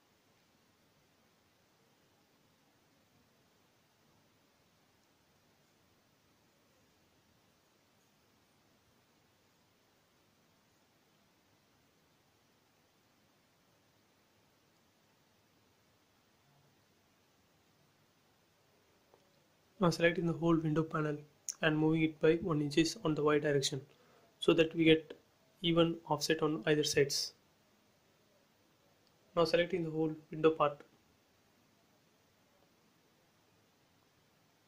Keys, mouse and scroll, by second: 0.0 shift+', 0.1 Return, 0.5 space, 0.6 scroll down 1, 2.4 click, 3.9-6.2 scroll up 1, 6.9 ctrl+z, 8.4 click, 9.0 scroll up 1, 10.3 shift+click, 12.1 m, 12.4 click, 13.5 Left, 14.5 1, 15.0 shift+', 15.2 Return, 15.6 scroll down 1, 18.1 click, 19.3-20.1 scroll up 1, 20.1 m, 20.5 click, 21.5 Left, 22.4 1, 22.9 shift+', 23.0 Return, 23.3 space, 24.0 click, 24.6 middle click, 25.7 scroll down 1, 26.1 middle click, 26.2 middle click, 26.7 scroll down 1, 27.0 shift+middle click, 28.0 scroll up 1, 29.7 scroll down 1, 30.2 scroll up 1, 31.5 scroll down 1, 32.2 middle click, 33.4-34.2 scroll up 1, 34.2 click.